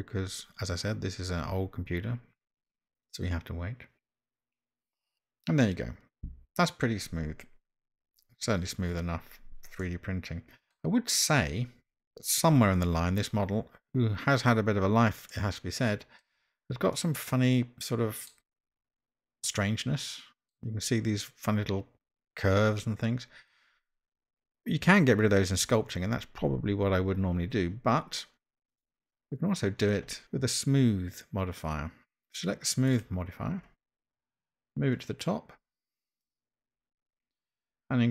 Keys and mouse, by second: 9.9-10.7 middle drag, 15.3-16.2 middle drag, 17.0-18.3 middle drag, 19.5-20.5 middle drag, 30.2-33.1 drag, 34.9-36.3 drag.